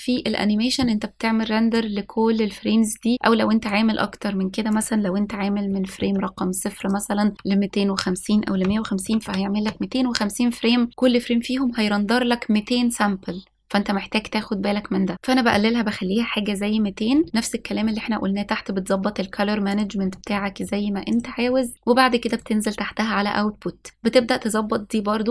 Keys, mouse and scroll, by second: 2.6-4.5 drag, 5.5-6.9 drag, 7.3-10.9 drag, 17.7-18.7 scroll down 3, 18.7-20.4 scroll down 2, 20.5 click, 20.8-21.7 scroll up 3, 21.7 click, 23.1 click.